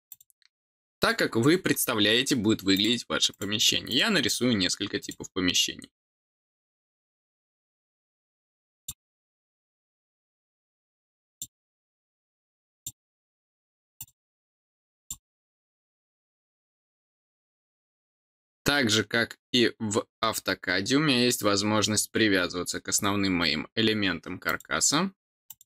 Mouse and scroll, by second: 0.0 click, 0.9 click, 2.7 click, 3.3 click, 3.8 click, 5.0 click, 6.7 click, 7.3 click, 8.7 click, 10.1 click, 11.2 click, 12.7 click, 13.9 click, 14.9 click, 24.4 click, 25.4 click.